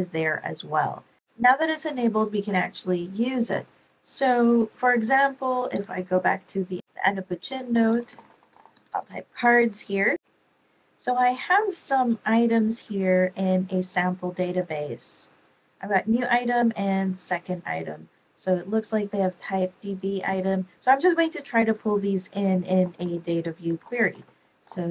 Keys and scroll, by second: 4.7-5.5 typing, 5.7 Return, 7.4-9.2 typing, 23.3-24.9 typing.